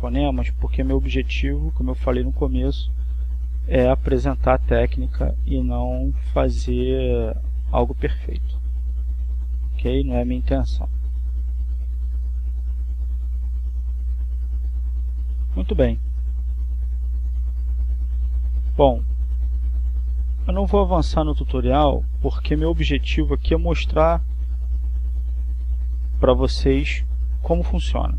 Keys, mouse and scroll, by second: 1.2 click, 2.6-4.4 drag, 5.0 click, 5.8 click, 7.0-8.6 drag, 9.2 click, 10.2-11.6 drag, 12.0 click, 13.4-14.5 drag, 14.9 click, 15.9 click, 17.3-28.1 drag.